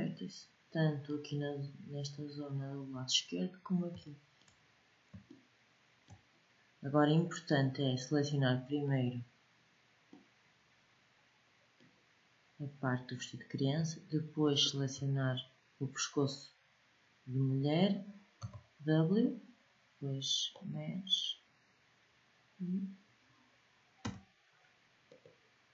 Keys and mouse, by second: 3.7 middle click, 4.0 middle click, 4.3 middle click, 5.0 middle click, 5.4-7.0 middle drag, 8.5 middle click, 9.3 middle click, 9.8 middle click, 10.5 middle click, 14.2 middle click, 18.0 w, 23.7 w.